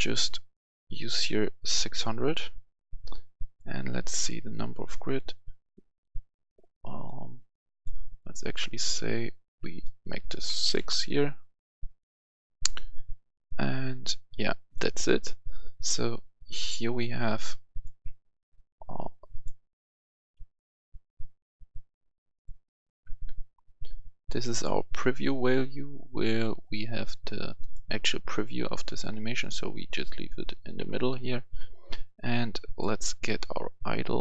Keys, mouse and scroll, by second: 7.7 click, 8.6 click, 10.6 typing, 10.8 Return, 14.6 click, 18.8 Delete, 19.3 click, 20.4 Delete, 21.1-23.4 drag, 23.5 F10, 24.4 click, 27.4 shift+click, 32.6-34.2 drag.